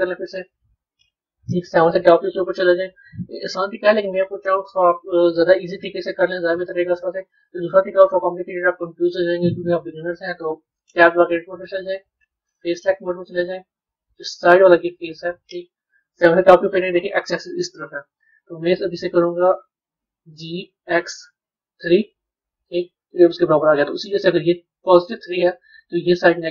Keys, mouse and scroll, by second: 0.2-1.6 middle drag, 1.6 KP_7, 2.2 scroll up 1, 2.5-3.0 scroll down 1, 3.0-4.4 scroll up 1, 10.8 b, 12.6 click, 13.6-14.8 middle drag, 14.8 click, 16.2 KP_7, 24.9-26.5 middle drag.